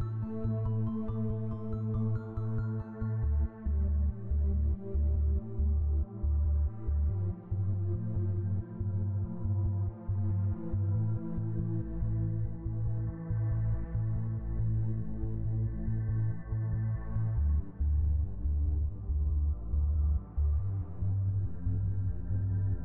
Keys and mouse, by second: 0.0 click, 1.6 click, 2.3-3.5 drag, 4.6-5.3 KP_Add, 6.2 click, 8.2 click, 9.6 KP_Add, 10.2 click, 16.5 click, 17.1 click, 19.0 F12, 21.1 click, 22.5 click.